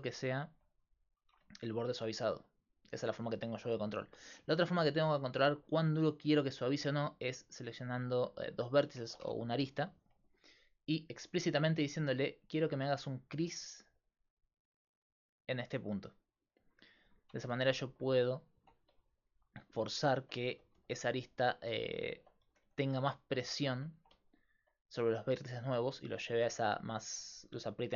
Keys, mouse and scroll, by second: 0.9-2.9 drag, 1.3 Tab, 4.3 Tab, 6.5-10.8 right drag, 9.0 ctrl+Tab, 10.8-12.2 middle drag, 12.5 middle click, 13.2-16.1 drag, 17.4 Tab, 18.6 Tab, 19.2-21.4 right drag, 20.5 g, 22.2-23.6 drag, 22.2-23.6 right drag, 22.5 g, 23.9 Tab.